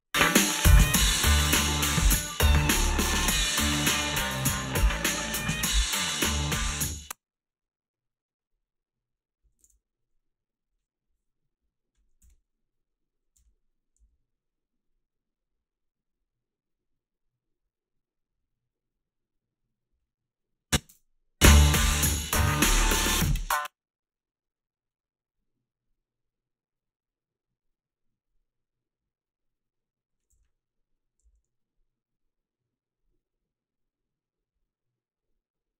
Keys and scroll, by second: 6.9 space, 9.7 ctrl+s, 12.3 h, 13.4 h, 14.0 a, 21.0 space, 23.3 space, 30.3 h, 31.3 a.